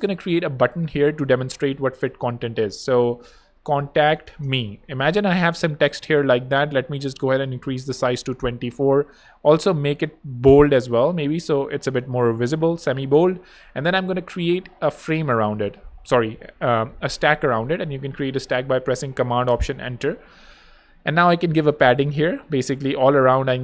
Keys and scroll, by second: 0.0-1.8 typing, 3.2 shift+super+a, 3.4-4.9 typing, 7.7 super+2, 7.8 4, 7.8 Return, 8.4 super+Return, 8.4 super+b, 15.1 alt+super+Return, 21.9-22.7 typing.